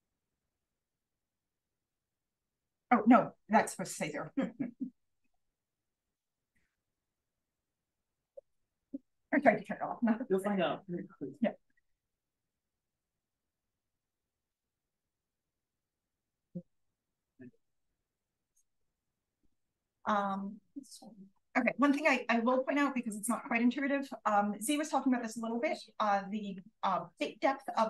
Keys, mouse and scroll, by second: 0.0 click, 0.8 1, 1.5 0, 2.3 click, 3.8 click, 6.0 click, 11.2-12.6 scroll up 1, 13.2 click, 13.2-13.9 scroll up 1, 13.6 d, 13.9-14.9 scroll down 1, 16.3-18.7 scroll up 1, 16.8 d, 18.7-21.2 scroll up 1, 21.2 scroll up 1, 21.6 d.